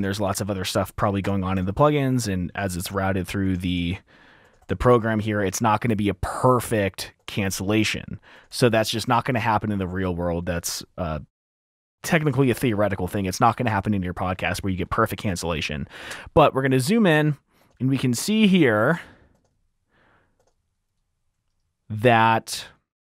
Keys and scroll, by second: 1.2 r, 1.7 F7, 4.6 F7, 6.5 F7, 8.8 F7, 10.4 super+z, 10.5 super+z, 12.0 F7, 14.5 t, 16.5 F7, 18.1 t, 18.3 t, 19.6 typing, 20.8 typing.